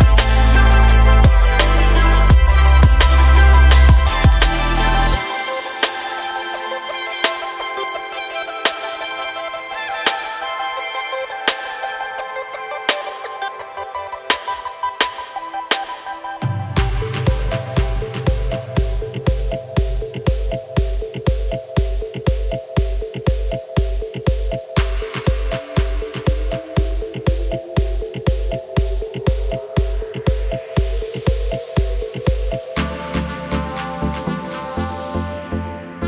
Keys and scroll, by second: 5.6 ctrl+r, 9.0 ctrl+r, 13.8 ctrl+r, 21.9 Delete, 34.1 ctrl+r.